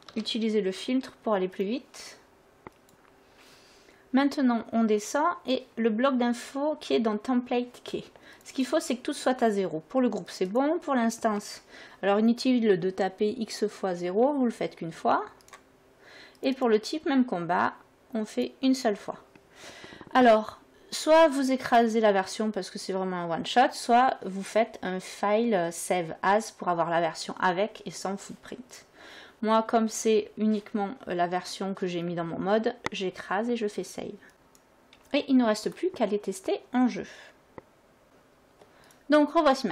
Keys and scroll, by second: 0.0-0.7 typing, 14.1 0, 15.3 0, 17.1 0, 18.3 0.